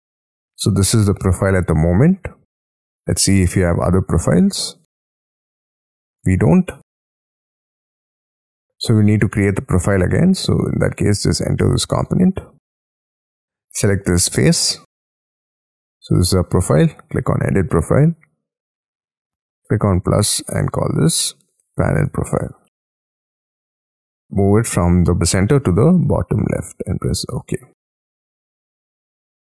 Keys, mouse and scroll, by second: 4.0-5.2 scroll down 12, 5.2 scroll up 7, 6.9-7.6 scroll up 5, 8.7 scroll up 1, 9.1 space, 10.2-11.0 scroll up 7, 11.0 double click, 11.2 double click, 11.6 double click, 11.9 double click, 12.9 double click, 13.0 double click, 13.4-14.3 scroll up 6, 14.3 middle click, 15.1 j, 15.6 j, 16.3-20.6 scroll down 5, 21.5-23.8 typing, 28.9 middle click, 29.2 scroll down 5.